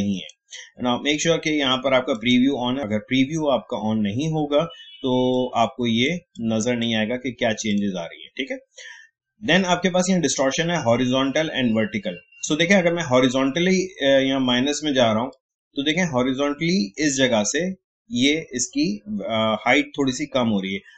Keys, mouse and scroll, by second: 5.6-7.7 drag, 13.3-18.2 drag.